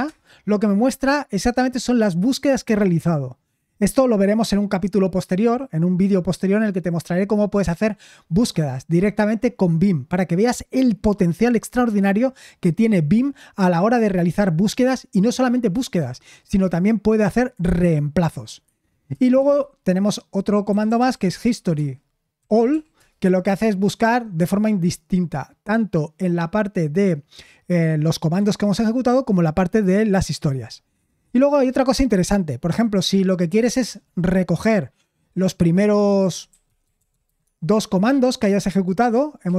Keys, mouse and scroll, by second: 0.0 Return, 19.3 shift+;, 21.0-23.2 typing, 36.7-37.7 typing.